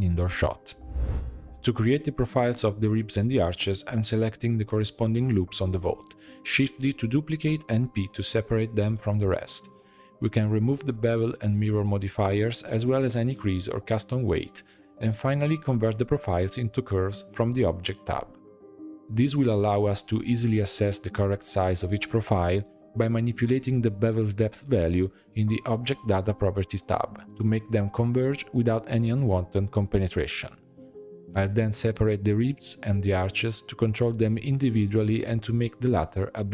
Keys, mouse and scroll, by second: 1.4 click, 1.6 Tab, 1.8 middle click, 2.2 2, 2.9 alt+click, 3.8 alt+shift+click, 4.6 alt+shift+click, 5.2 shift+d, 6.0 p, 6.7 Tab, 6.9 click, 7.5 click, 7.8 h, 8.2-9.0 middle drag, 9.0 click, 10.1 click, 11.0-11.9 drag, 11.9 Tab, 12.1 a, 12.8-14.2 drag, 14.2 Tab, 15.1-17.6 drag, 18.2 click, 18.7-20.0 middle drag, 20.0 shift+b, 21.0 shift+middle click, 21.8 click, 22.9-25.2 shift+drag, 25.2-26.1 right drag, 26.1-27.0 middle drag, 27.0 Tab, 27.4-28.5 drag, 28.5 l, 29.1 p, 30.0 Tab, 30.3 click, 30.8 click, 31.8-34.7 drag, 35.0-35.3 scroll down 4, 35.3-36.5 middle drag.